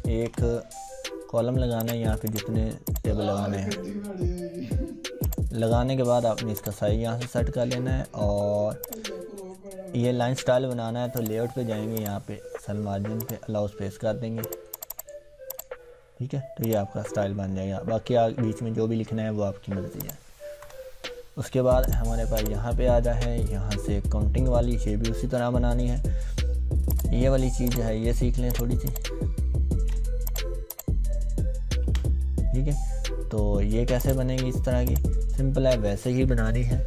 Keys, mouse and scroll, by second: 0.2 Return, 1.8 click, 5.2-7.8 drag, 16.1 scroll down 1, 16.7 click, 20.0 click, 20.6 BackSpace, 21.8 click, 22.7-25.5 scroll down 1, 25.5 scroll up 1, 26.8 click, 30.3 click, 32.3 scroll down 1, 34.0 click.